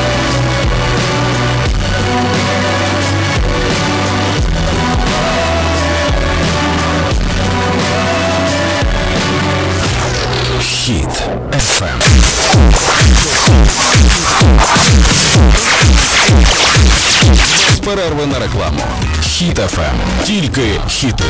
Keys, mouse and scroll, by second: 17.7 Page_Down.